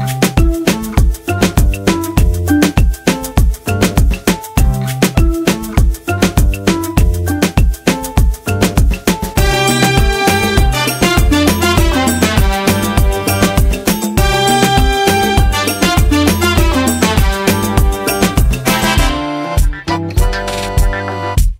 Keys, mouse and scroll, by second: 3.8 click, 15.7 click, 18.2-20.8 drag.